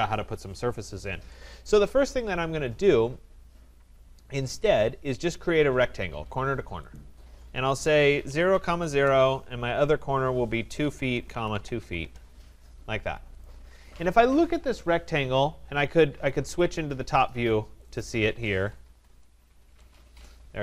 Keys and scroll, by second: 8.9 Return, 19.0 Return.